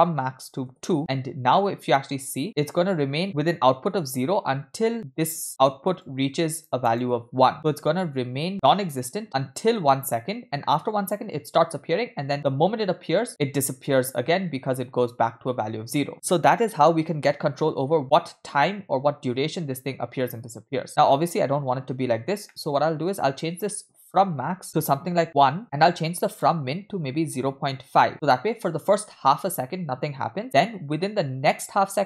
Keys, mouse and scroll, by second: 3.2 middle click, 3.2-5.1 scroll down 2, 5.5 drag, 6.0 click, 6.2 click, 9.8 space, 12.4 space, 16.1 space, 22.3 space, 22.5 middle click, 22.8-23.6 scroll up 1, 23.6 scroll up 1, 23.7-25.6 drag, 25.4 BackSpace, 26.3-28.5 drag.